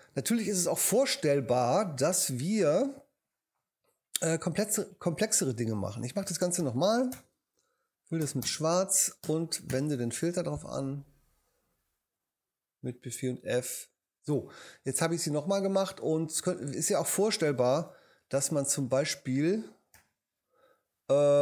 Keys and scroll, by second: 0.8 BackSpace, 6.6 shift+super+n, 7.1 shift+super+Return, 8.2 super+Return, 8.4 super+BackSpace, 9.7 super+f, 17.8 h, 19.9 h.